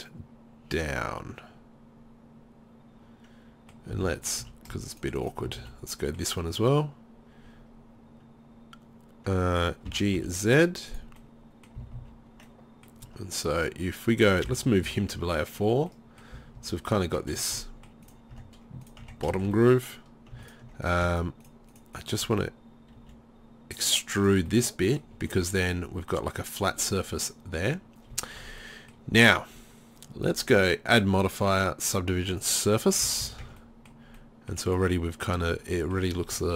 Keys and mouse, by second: 1.0 middle click, 1.2 middle click, 1.9 middle click, 3.1 middle click, 3.3 middle click, 4.1 ctrl+z, 5.0-7.6 right drag, 5.6 z, 9.9 g, 11.2 middle click, 11.8 z, 12.0 z, 13.1 Tab, 13.6 right click, 14.5 m, 16.4 z, 16.6 z, 17.1 Tab, 18.1-22.4 right drag, 18.4 Tab, 19.0 Tab, 23.0 e, 24.2 click, 24.5-26.2 middle drag, 27.6 middle click, 30.3-32.0 drag, 32.0-32.8 middle drag, 33.1 z, 33.2 z, 33.5 Tab, 35.5 Tab.